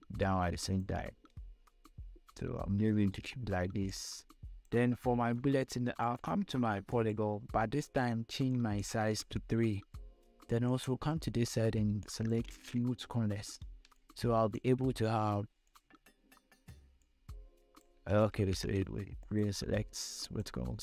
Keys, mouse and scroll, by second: 1.5-2.3 scroll down 2, 2.3-3.2 scroll down 1, 3.4 scroll up 1, 4.2 space, 4.3 click, 4.5 space, 6.3 right click, 7.2 click, 11.1 click, 13.3 scroll up 1, 14.2 space, 14.4 click, 14.6 space, 16.0 click, 18.6 ctrl+z, 19.6-20.8 drag.